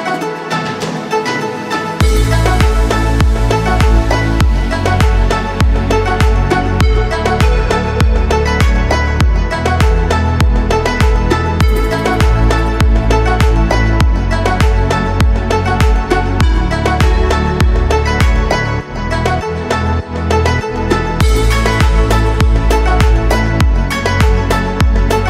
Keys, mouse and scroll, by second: 3.6 click, 5.6-7.6 drag, 9.0 shift+click, 10.3 ctrl+p, 17.0 click, 19.3 click, 20.0 click, 21.4 click, 21.9-23.3 scroll down 4, 22.7-24.0 middle drag.